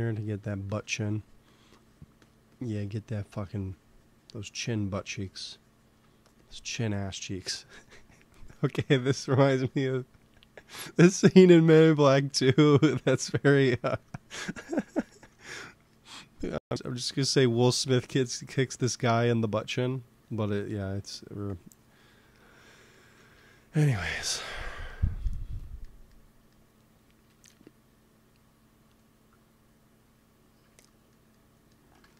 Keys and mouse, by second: 3.1 f, 3.8-6.0 drag, 6.8-8.5 drag, 8.5 f, 9.1-11.0 drag, 11.0 ctrl+z, 11.8 f, 12.3 click, 13.1 click, 17.7 f, 17.9-19.8 drag, 18.4 f, 18.9 f, 19.6 f, 20.1-23.0 drag, 23.3 ctrl+s, 27.2 KP_1, 27.4 KP_3.